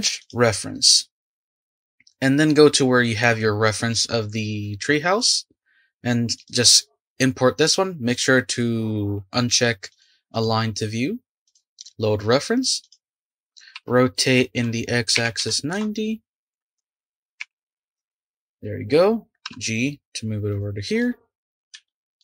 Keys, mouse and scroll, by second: 12.8 click, 13.7 r, 19.4 g, 21.0-22.2 middle drag.